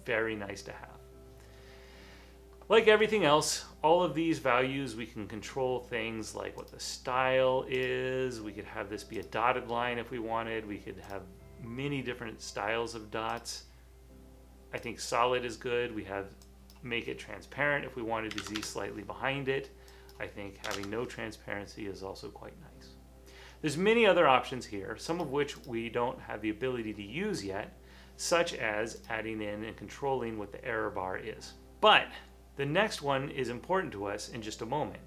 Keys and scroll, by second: 18.2-19.1 typing, 20.5-21.3 typing.